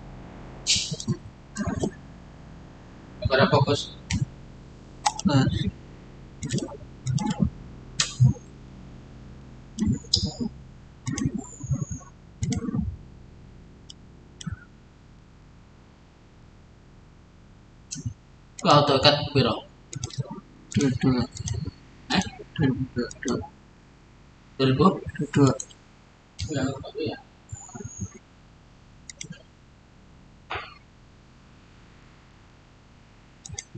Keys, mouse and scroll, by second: 1.5 Return, 2.6-3.0 scroll down 1, 4.9 click, 9.2 click, 9.3-10.9 middle drag, 10.9 click, 13.7 middle click, 13.8-16.6 middle drag, 18.4 click, 25.3 right click, 28.9 click, 33.3 click.